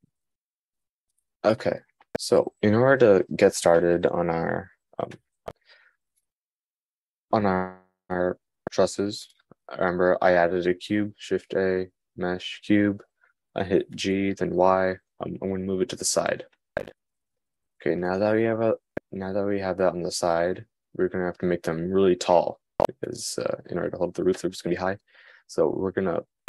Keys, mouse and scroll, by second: 7.0 x, 8.1 shift+a, 13.5 g.